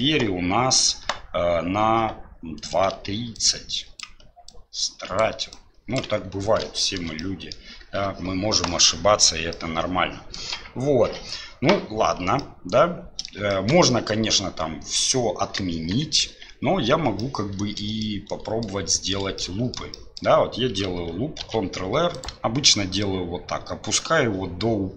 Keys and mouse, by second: 3.4-5.2 drag, 5.5 click, 6.3 d, 6.8 shift+click, 7.2 click, 8.7 click, 9.5 click, 12.4 click, 13.5 shift+click, 15.7 KP_1, 16.4 KP_3, 17.2 middle click, 18.0 middle click, 18.9 shift+middle click, 19.4 middle click, 19.9 shift+middle click, 21.4 ctrl+r.